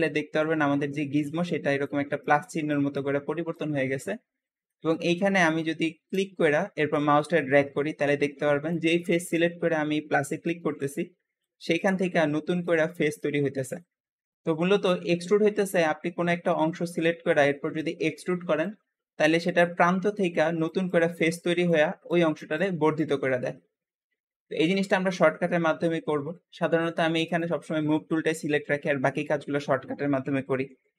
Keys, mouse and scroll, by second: 0.0 Escape, 0.0 `, 4.0 Escape, 4.5-6.0 shift+middle drag, 6.0 shift+click, 9.1 click, 10.3 click, 11.6 click, 12.5 click, 13.4 shift+middle click, 14.1-14.8 scroll down 1, 14.8-17.6 shift+middle drag, 17.6 click, 18.8 `, 24.7 Escape, 27.1-30.2 drag.